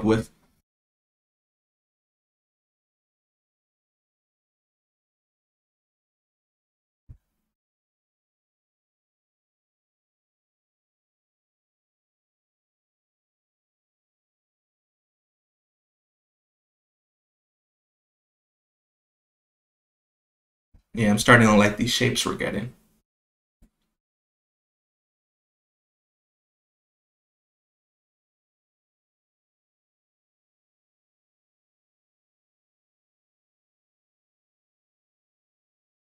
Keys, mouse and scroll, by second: 3.6-5.0 drag, 7.3-8.9 drag, 9.6 click, 10.3 click, 13.3 click, 13.8 click, 14.3-15.5 drag, 18.6 click, 20.0 click, 20.8 click, 22.5-24.2 drag, 24.8 click, 27.0 click, 28.7-29.9 drag, 30.4 click, 30.9 click, 31.9 click, 33.2 click, 35.4-36.1 drag.